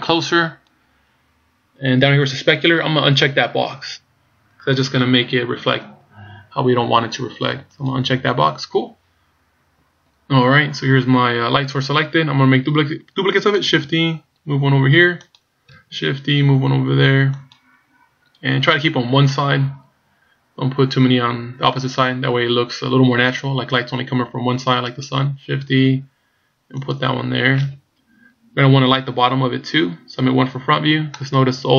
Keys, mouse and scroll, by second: 7.8 click, 13.8 shift+d, 15.8 shift+d, 25.0 right click, 25.8 shift+d, 30.2 KP_1, 31.2-31.7 scroll down 4.